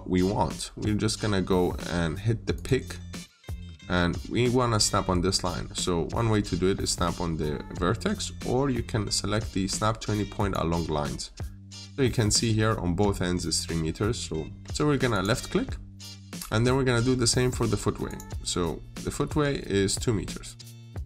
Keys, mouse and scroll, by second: 3.0-7.5 scroll up 1, 10.2 click.